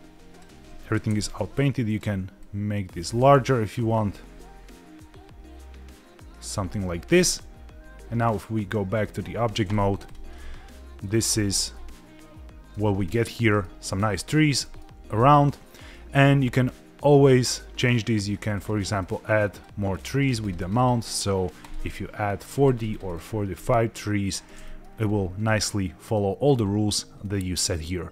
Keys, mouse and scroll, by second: 1.0 f, 1.8 click, 2.4 click, 7.1 f, 7.9 middle click, 8.1-9.1 drag, 10.0 click, 10.3-11.0 middle drag, 11.1 scroll down 1, 11.3-12.1 scroll up 3, 11.7-12.7 middle drag, 13.0 shift+middle click, 13.5 middle click, 14.6 shift+middle click, 15.0-15.4 scroll up 2, 15.7-16.5 scroll down 1, 18.0 click, 18.5 click, 19.0 click, 19.5 click, 19.9 click, 20.4 click, 20.7 click, 21.6 click, 22.5 click, 23.0 click, 23.5 click, 24.6 middle click, 24.9-25.4 scroll down 3, 25.4 middle click, 26.4-27.0 scroll up 2, 27.0 scroll up 2, 27.2-27.5 shift+middle drag.